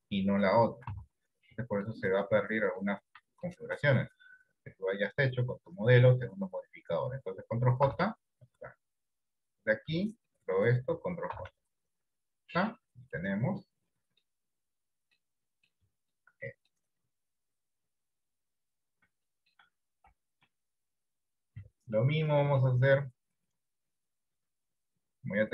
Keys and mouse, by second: 1.1 ctrl+z, 7.9 ctrl+j, 11.5 ctrl+j, 13.2-14.3 middle drag, 14.9 middle click, 15.5 middle click, 16.0 shift+middle click, 16.5 middle click, 17.8-19.0 drag, 19.4 shift+middle click, 20.1 KP_1, 20.7 KP_3, 22.1 middle click, 22.7 middle click.